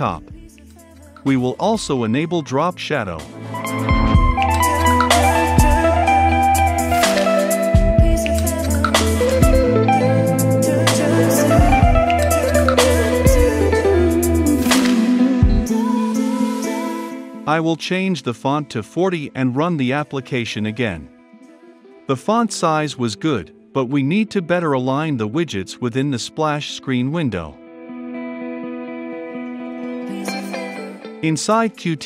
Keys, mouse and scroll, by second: 1.7-3.5 typing, 3.9 Return, 4.6-7.4 typing, 7.6 Return, 8.2 ctrl+s, 8.8 ctrl+F5, 15.8 click, 16.1-18.7 typing, 18.3 Return, 19.3 ctrl+F5, 29.4-32.0 drag.